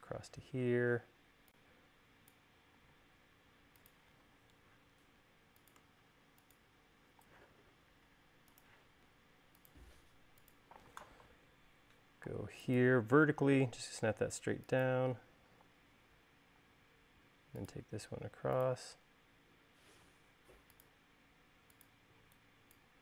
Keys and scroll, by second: 2.9 l, 7.3 l, 16.7 |, 22.1 e.